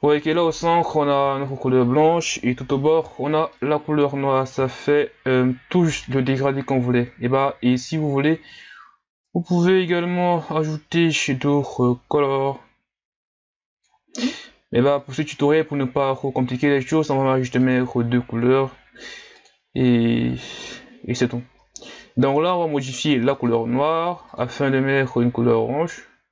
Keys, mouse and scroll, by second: 0.3-0.7 shift+scroll down 2, 0.7 middle click, 1.3-2.7 shift+scroll up 1, 2.7-3.5 shift+scroll up 1, 3.5-4.3 middle drag, 4.3-4.8 scroll up 1, 4.8-6.2 shift+scroll up 2, 6.2-12.3 drag, 17.7-26.3 drag.